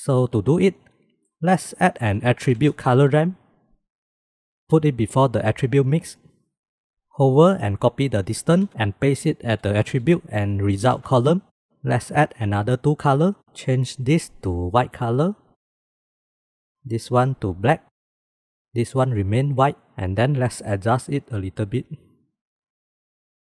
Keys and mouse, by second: 1.1 shift+a, 6.6 middle click, 7.9 ctrl+c, 9.0 ctrl+v, 9.8 ctrl+v, 12.2-14.0 drag, 14.3 click, 16.7 click, 22.5-23.3 drag.